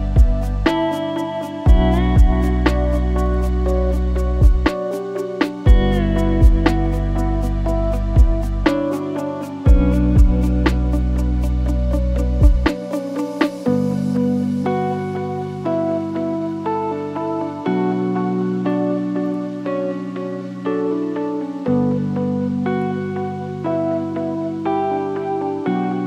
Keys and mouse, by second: 1.3-2.1 drag, 2.4 middle drag, 2.9 shift+middle click, 6.4 right click, 12.4 middle click, 13.2 n, 19.4-19.8 drag, 20.0-22.6 middle drag, 23.7 middle click, 24.0 middle click.